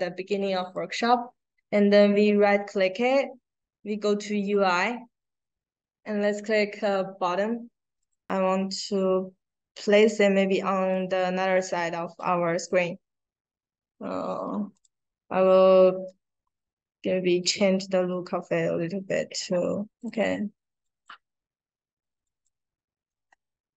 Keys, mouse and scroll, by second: 0.5 right click, 7.9 click, 8.5-10.8 drag, 11.5 click, 16.0-16.4 scroll down 2, 16.4-17.6 scroll up 2, 17.6-18.1 scroll down 2, 18.1-18.5 scroll up 2, 18.8 scroll down 2, 19.1 middle click, 19.9 click, 20.8 click, 22.2 click.